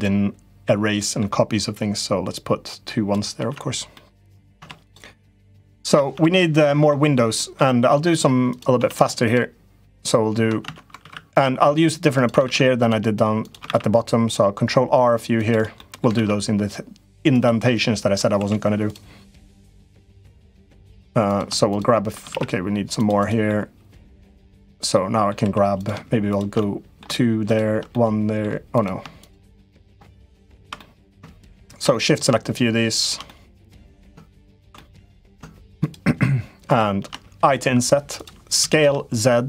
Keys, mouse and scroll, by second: 0.8 middle click, 1.5-2.9 drag, 3.1 Tab, 3.7 middle click, 4.3 Tab, 4.6 click, 5.2 middle click, 5.9 Tab, 6.1 middle click, 7.1 middle click, 8.3 click, 8.5 Tab, 9.0 click, 10.4 Tab, 10.7 ctrl+r, 12.2 ctrl+r, 13.4 ctrl+r, 15.7 middle click, 15.9 ctrl+r, 17.4 middle click, 18.2 3, 19.5-20.5 middle drag, 21.1 click, 21.4 shift+click, 22.0 ctrl+r, 23.4 middle click, 24.1 middle click, 24.7 middle click, 25.2 3, 25.6 click, 26.1 click, 26.3 middle click, 27.3 shift+click, 27.6 middle click, 28.5 click, 29.0 shift+click, 29.3 middle click, 30.3 shift+click, 30.5 middle click, 31.2 shift+click, 31.6 middle click, 32.7 shift+click, 33.0 middle click, 34.5 middle click, 35.6 shift+click, 36.4 shift+click, 38.3 s.